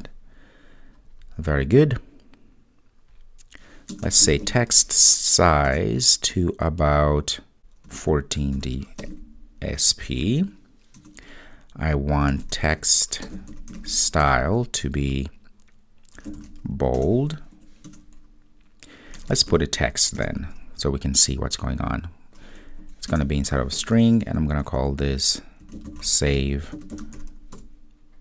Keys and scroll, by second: 5.8 Return.